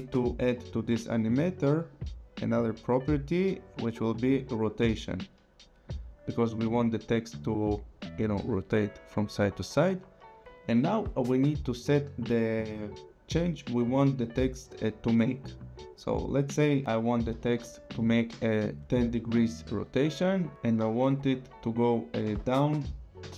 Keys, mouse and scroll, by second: 0.3 click, 1.9 click, 4.7 click, 16.7 click, 17.3 KP_1, 17.5 KP_0, 18.3 Return, 20.5 ctrl+z, 21.1 click, 22.2 KP_0, 23.2 Return.